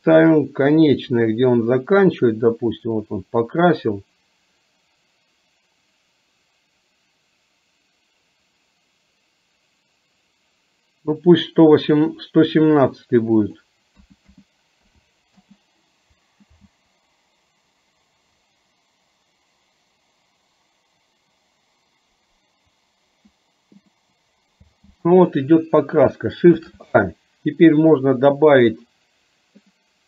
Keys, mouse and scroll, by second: 1.0-12.1 drag, 13.6-15.5 drag, 14.4 KP_1, 16.8 space, 24.6 space, 26.6 shift+a.